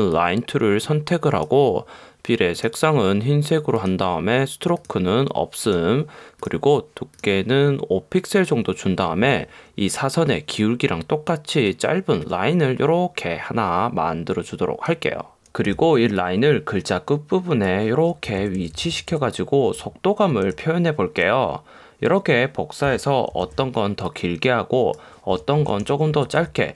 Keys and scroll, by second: 15.7 v, 18.3 Left, 18.4 Up, 19.9 Up, 20.6 Right, 23.4 super+j, 25.7 shift+Left, 26.2 Up, 26.5 Down.